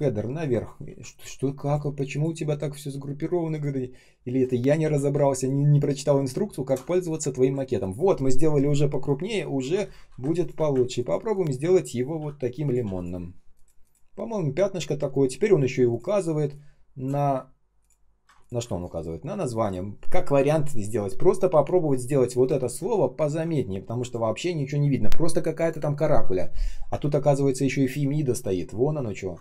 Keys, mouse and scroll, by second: 0.7 ctrl+я, 1.5 shift+click, 2.0 shift+click, 2.5 ctrl+shift+ъ, 5.4 shift+click, 10.9 ctrl+click, 11.2 ctrl+click, 12.1 ш, 18.3 ctrl+shift+click, 18.6 alt+p, 22.4 ctrl+scroll up 1, 23.5 ctrl+scroll down 1, 26.9-27.2 ctrl+scroll up 1, 28.4 ctrl+scroll down 1.